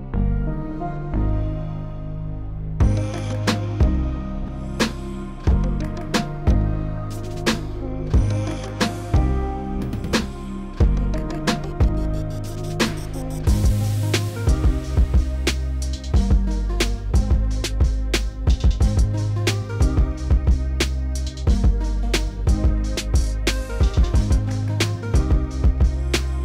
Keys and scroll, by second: 13.8 s, 16.2 s, 19.4 s, 24.0 s.